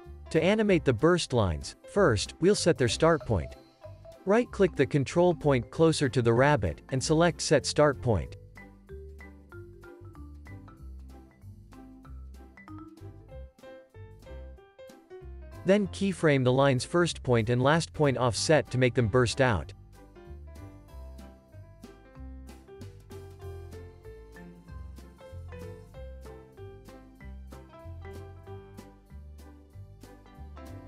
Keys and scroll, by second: 0.2 space, 0.7 super+space, 1.1 Tab, 12.6 space, 19.1 alt+x, 22.1 z, 23.5 alt+x, 24.4 alt+x.